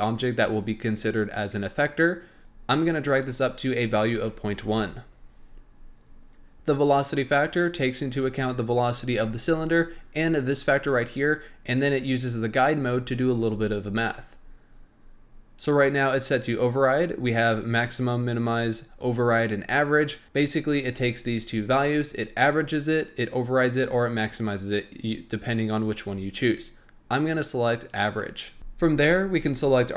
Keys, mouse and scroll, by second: 2.4 click, 3.1-6.1 drag, 15.5-18.5 drag, 22.1-25.1 drag, 29.4 click.